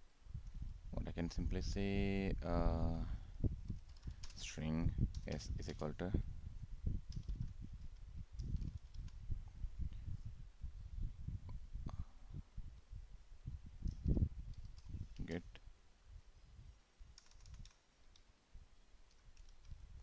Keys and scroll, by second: 15.3 ctrl+space.